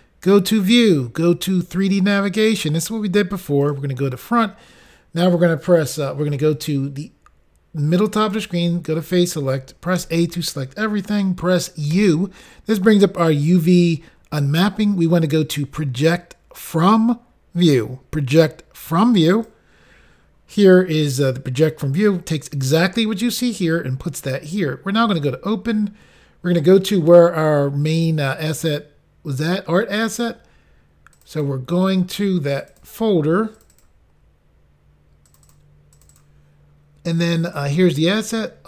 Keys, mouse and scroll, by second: 0.6 click, 0.7 click, 2.5 click, 2.6 click, 3.6 click, 3.7 click, 8.2 click, 8.3 click, 19.3 click, 19.5 click, 20.4-20.8 scroll up 3, 25.2 click, 25.3 click, 26.6 click, 26.7 click, 28.0 scroll down 2, 30.0 click, 30.1 click, 30.2 click, 31.2 double click, 31.3 double click, 31.4 double click, 31.5 double click, 32.6 double click, 32.7 double click, 32.7 double click, 32.8 double click, 33.6 double click, 33.7 double click, 33.8 double click, 35.3 double click, 35.4 click, 35.6 double click, 36.0 double click, 36.1 double click, 37.5 double click, 37.6 double click.